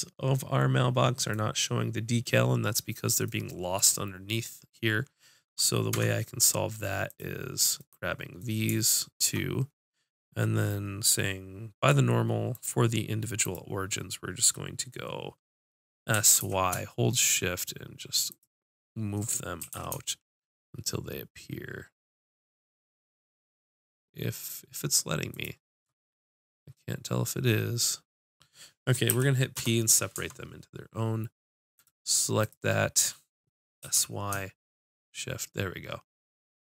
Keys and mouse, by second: 2.6-3.6 middle drag, 3.9-5.7 drag, 6.0 Tab, 7.1-9.5 drag, 9.5 Tab, 9.8-14.3 drag, 14.3-16.1 middle drag, 16.2 s, 18.5-19.6 drag, 18.8 middle click, 19.7 s, 25.7 click, 25.7-29.1 middle drag, 29.1 p, 30.2 Tab, 31.8 click, 32.5-34.0 drag, 33.8 s.